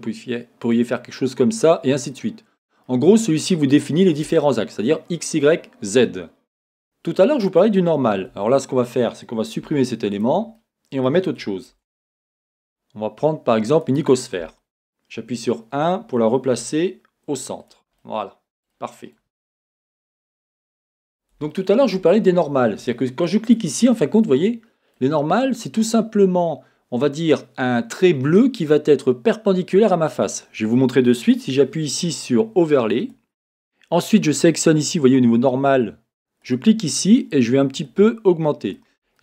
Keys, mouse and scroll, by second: 2.5-23.5 middle drag, 8.3 Tab, 9.6 x, 16.5 g, 17.7 click, 20.2-20.8 scroll, 21.0 Tab, 23.5 click, 23.5-39.2 middle drag.